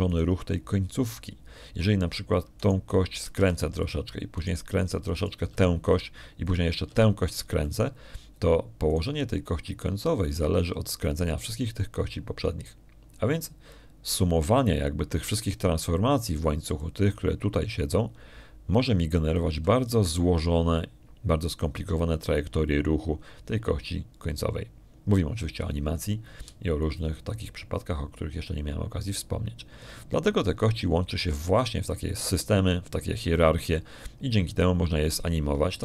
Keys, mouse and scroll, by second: 2.0 right click, 4.4 right click, 5.2 r, 5.7 click, 6.2 right click, 7.0 right click, 7.4 r, 7.7 click, 8.3 right click, 8.8 r, 9.5 click, 10.8 right click, 18.6 d, 18.6-21.4 drag, 18.8 d, 28.3 d, 28.6 d, 28.7-33.2 right drag.